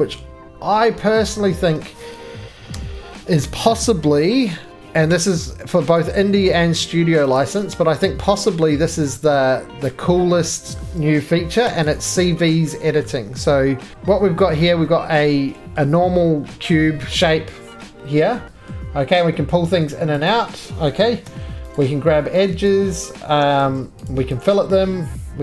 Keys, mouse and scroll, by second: 1.3 click, 2.7 c, 6.0 click, 7.4 click, 7.6 right click, 8.7 middle click, 8.8-9.9 scroll down 5, 9.9 middle click, 10.1 scroll down 1, 10.8 middle click, 10.8-11.4 scroll, 11.7 3, 12.0 click, 13.1 middle click, 14.6 middle click.